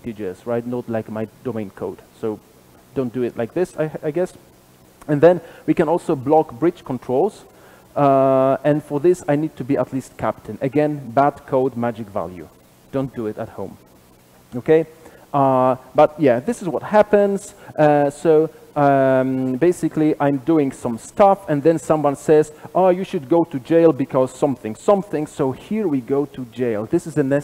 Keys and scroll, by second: 2.8 super+[, 2.8 ctrl+alt+Left, 7.8 super+b, 13.7 alt+Return, 15.8 super+[, 15.8 ctrl+alt+Left.